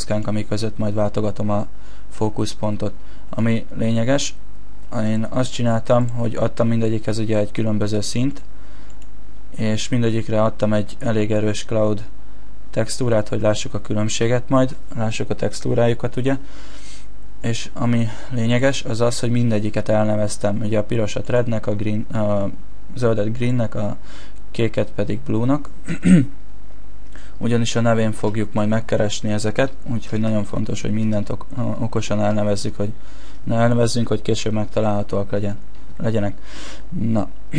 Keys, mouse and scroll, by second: 0.1 right click, 3.3 right click, 5.1 click, 6.0 click, 8.3 right click, 8.9 right click, 17.5 right click, 18.5 click, 21.3 right click, 23.4 right click.